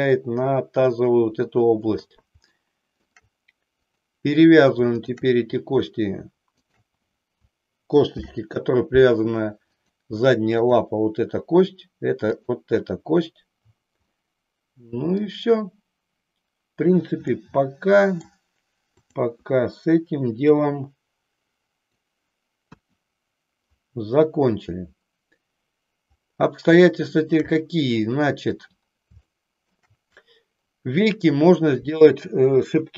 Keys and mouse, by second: 2.5 shift+middle click, 4.0 click, 5.1 shift+click, 6.6 shift+click, 8.1 ctrl+p, 10.7 click, 12.1 click, 14.0-15.3 middle drag, 17.3-18.3 middle drag, 19.1 click, 20.4-22.0 drag, 22.6 KP_1, 26.9-28.5 shift+middle drag, 29.4 shift+middle click.